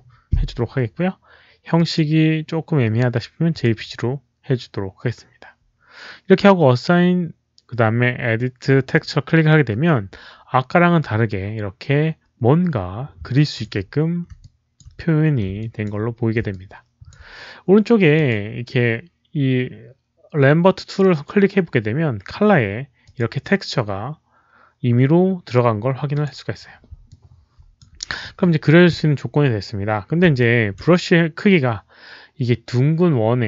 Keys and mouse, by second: 1.7 click, 1.7 KP_1, 3.4 Return, 3.4 click, 3.4 KP_4, 3.4 KP_1, 3.4 KP_2, 3.4 KP_0, 6.1 Return, 6.1 click, 6.1 KP_4, 6.1 KP_1, 6.1 KP_2, 6.1 KP_0, 8.8 Return, 8.8 click, 8.8-10.1 typing, 9.5 Return, 9.5 click, 10.1 Return, 10.1 click, 13.2 alt+click, 14.3 alt+click, 15.5 alt+click, 16.4 alt+click, 18.1 alt+click, 22.1 alt+click, 22.9 alt+click, 24.8 click, 25.1 alt+click, 26.0 alt+click, 27.0 alt+click, 29.0 alt+click, 30.3 alt+click.